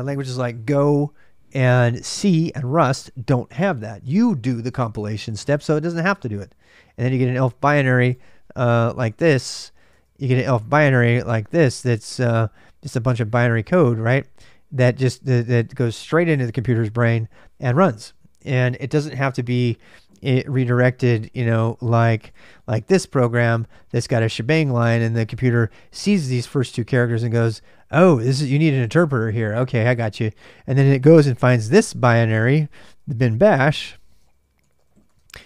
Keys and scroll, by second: 8.8-10.1 typing, 12.9-14.0 typing, 19.9-22.5 typing, 32.5-35.4 typing.